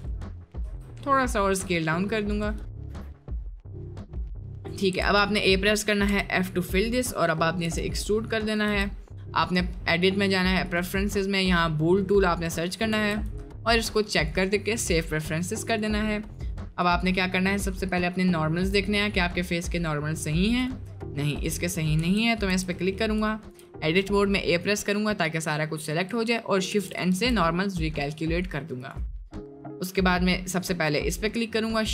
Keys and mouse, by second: 0.6 s, 2.9 Tab, 3.2 click, 4.3 middle click, 5.2 a, 6.0 f, 6.5 middle click, 7.1 middle click, 8.7 Tab, 9.1 middle click, 10.0-10.9 drag, 14.8 middle click, 15.5 click, 16.2 middle click, 18.0-19.0 middle drag, 19.1 middle drag, 19.5-20.5 middle drag, 20.7 middle click, 21.1 middle click, 22.0 Tab, 22.5 a, 22.9 middle click, 26.7 shift+n, 27.1 Tab, 28.2-29.1 drag, 29.3 middle click, 30.6 click, 31.0 middle click.